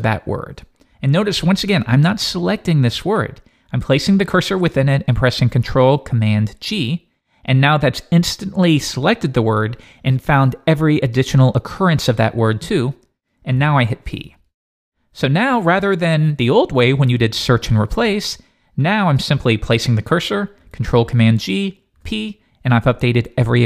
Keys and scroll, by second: 6.7 ctrl+super+g.